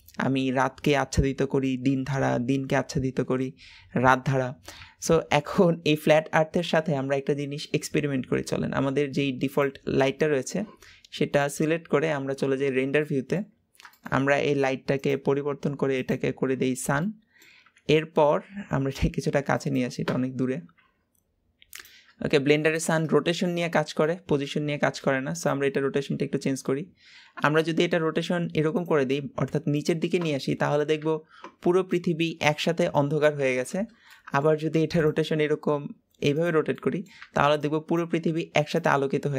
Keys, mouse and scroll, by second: 5.6 scroll down 1, 5.8-7.2 middle drag, 7.2-7.6 scroll down 2, 7.9-8.5 scroll up 3, 9.4 click, 10.1-11.6 shift+middle drag, 11.6 click, 12.7 scroll down 2, 13.0-13.4 middle drag, 13.4-13.7 scroll up 4, 13.9-14.9 shift+middle drag, 14.9 click, 15.9 click, 16.6-17.0 scroll down 2, 17.0-17.7 middle drag, 17.7 g, 20.0-20.7 scroll down 2, 20.7 g, 22.0-22.7 scroll up 5, 22.7 shift+middle click, 23.4-24.0 scroll up 2, 24.0 middle click, 24.6 g, 30.2-33.3 middle drag, 33.6-34.0 scroll down 3, 34.0 middle click, 34.5 g, 36.7-39.3 middle drag.